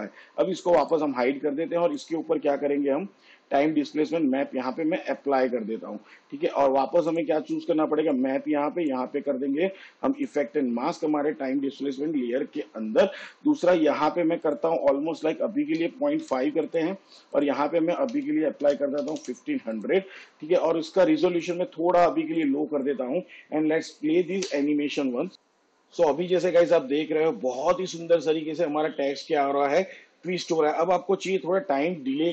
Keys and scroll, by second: 16.0 ., 16.4 5, 18.3 1, 18.8 5, 24.6 space, 31.9 space.